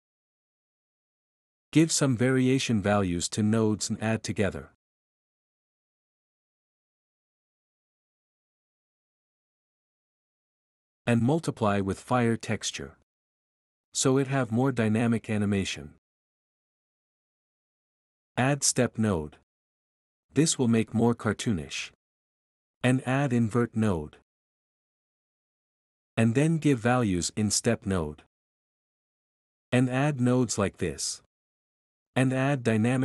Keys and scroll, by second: 1.1 ctrl+v, 1.2 ctrl+v, 2.1 a, 4.1 u, 5.5 2, 7.4-9.8 typing, 12.6 m, 19.0-20.3 typing, 23.2 o, 25.5-27.0 typing, 29.7 a, 31.9 m.